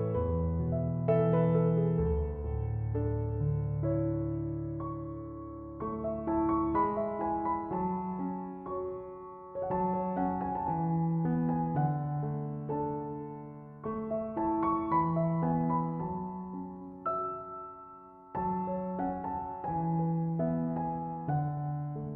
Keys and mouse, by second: 0.2 click, 3.6-16.7 drag, 16.7 2, 18.5-22.1 drag.